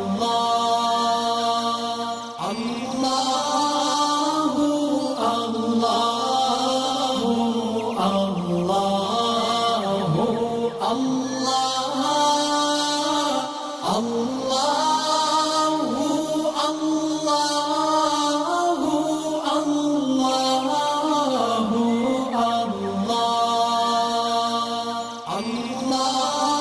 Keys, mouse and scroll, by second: 0.0-1.5 alt+drag, 6.5 click, 8.3 shift+click, 14.1 alt+scroll up 1, 15.3 click, 17.1 click, 19.2 click, 20.7 click, 22.2 alt+scroll down 1, 23.7 click, 24.3 alt+scroll up 1, 25.0 space, 25.1 click, 25.6-25.9 alt+scroll up 1.